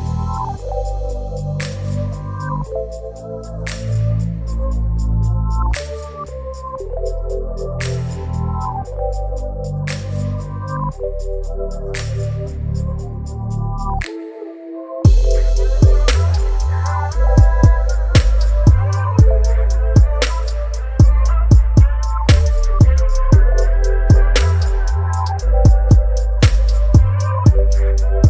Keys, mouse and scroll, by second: 3.1-8.4 alt+drag, 8.5 click, 10.7 ctrl+t, 13.3-22.1 shift+drag, 26.1 ctrl+t, 28.1-28.2 drag.